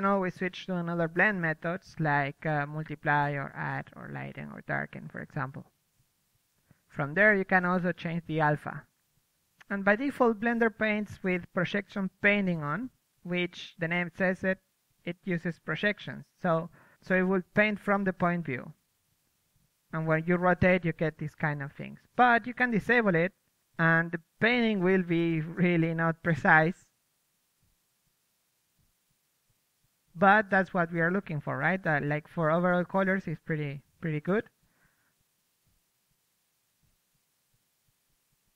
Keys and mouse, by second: 0.4-1.6 drag, 1.0 f, 2.5-5.5 drag, 5.3 ctrl+z, 5.5 ctrl+z, 7.3 click, 9.8-13.6 drag, 11.6-12.2 right drag, 13.9 ctrl+z, 14.2 ctrl+z, 14.3 ctrl+z, 14.9 ctrl+z, 15.1 ctrl+z, 15.4 ctrl+z, 15.7 ctrl+z, 16.1 ctrl+z, 18.0 click, 19.2 ctrl+z, 19.2 click, 19.9 a, 21.1 a, 24.0-26.9 drag, 25.8 KP_3, 27.7 ctrl+z, 27.9 ctrl+z, 28.4 ctrl+z, 28.8-31.9 drag, 31.9 KP_3, 33.5-38.5 drag.